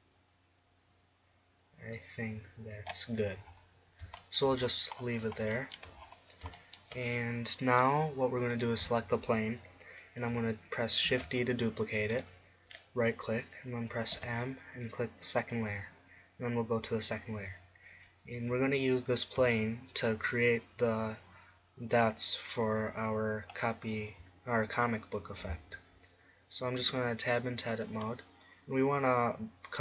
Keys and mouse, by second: 8.6-10.3 right drag, 11.1 shift+d, 12.2-14.2 right drag, 14.2 m, 17.1-18.7 drag, 26.1-27.9 middle drag, 26.8 Tab.